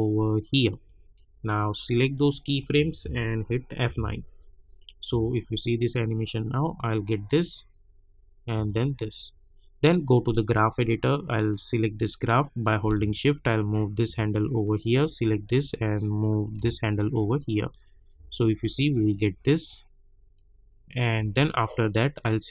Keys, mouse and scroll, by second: 3.8 F9, 4.7 click, 5.0 space, 8.5 space, 10.2-17.8 drag, 18.1 space, 21.1 space, 21.9 click.